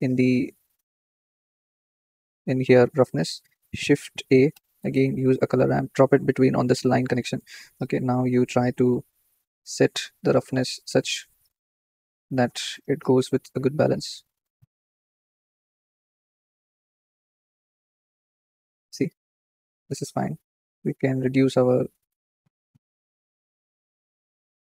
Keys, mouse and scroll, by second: 0.3-0.7 drag, 0.7-1.8 scroll up 4, 1.8-6.7 drag, 7.3-9.4 drag, 12.9 click, 14.2 click, 15.4-16.0 drag, 20.5-24.0 drag.